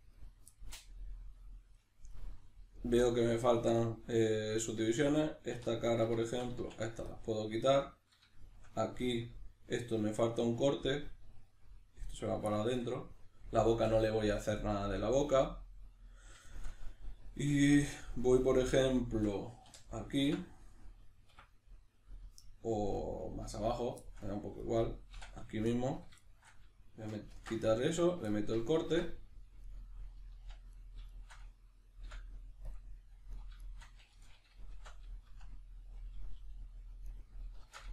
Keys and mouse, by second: 0.1 right click, 0.5-2.1 middle drag, 2.1 right click, 4.7-5.9 middle drag, 5.5 3, 5.9 right click, 6.3 shift+right click, 6.6 x, 7.8-19.8 middle drag, 19.6 3, 19.8 right click, 20.2 x, 23.6 right click, 24.0-24.6 shift+middle drag, 24.6 right click, 25.1 x, 26.3-27.3 shift+middle drag, 27.3 ctrl+r, 28.0 right click, 28.3-29.7 shift+middle drag, 28.9 1, 29.7 right click, 30.3 z, 30.7 right click, 31.1 shift+right click, 32.0 m, 33.3 right click, 33.6 shift+right click, 34.7 shift+r, 35.3 z, 36.4 g, 37.2 right click, 37.6 shift+Tab.